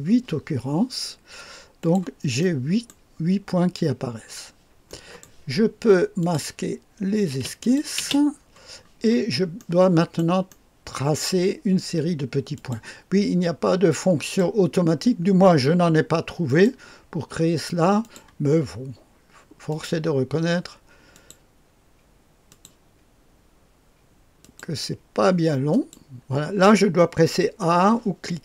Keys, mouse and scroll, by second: 1.7 click, 2.4 click, 2.5-4.8 right drag, 4.8 middle click, 5.2-5.8 right drag, 6.2-7.3 drag, 6.2 middle click, 7.3 space, 7.6 click, 7.6 middle click, 8.0 space, 9.0-9.5 scroll up 1, 9.5-11.7 right drag, 12.5-14.8 drag, 16.4 click, 16.4 middle click, 16.4 right click, 18.0 click, 18.0 middle click, 18.0 right click, 19.6 click, 19.6 middle click, 19.6 right click, 21.1 click, 22.4 click, 24.4 click, 25.7 click.